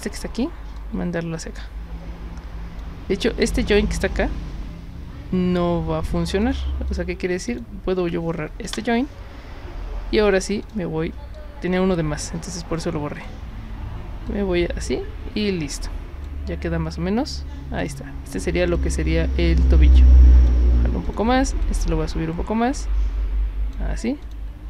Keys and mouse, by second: 0.8-2.8 drag, 6.4 click, 6.9 click, 7.5 click, 10.6 click, 11.3-12.8 drag, 13.2 click, 14.3-16.3 drag, 17.8 click, 18.7-20.5 drag, 21.1 click, 21.6-23.7 drag, 24.2 click.